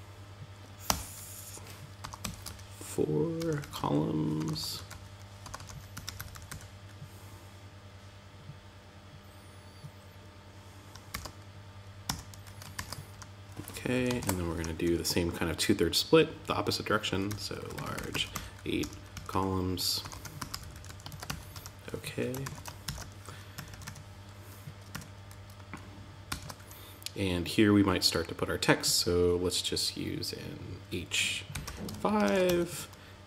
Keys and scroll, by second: 10.5 shift+., 11.4 Tab, 12.1 super+s, 12.4 Return, 13.3 Down, 13.5 super+Right, 13.8 Return, 20.4 shift+., 20.6 Tab, 20.9 Return, 21.8 super+s, 22.2 shift+super+t, 22.9 Tab, 25.6 super+s, 31.6 shift+., 31.8 Tab, 32.8 super+z.